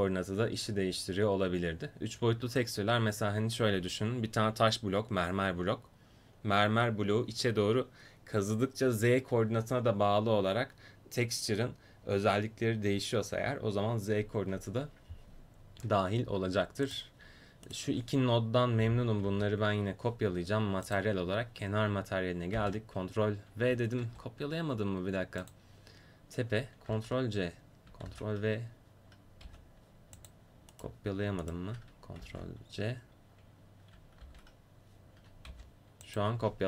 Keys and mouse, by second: 19.3 ctrl+c, 22.6 ctrl+v, 24.2 ctrl+z, 26.9 ctrl+c, 28.1 ctrl+v, 29.5 g, 32.2 ctrl+c, 34.3 ctrl+v, 35.5 g.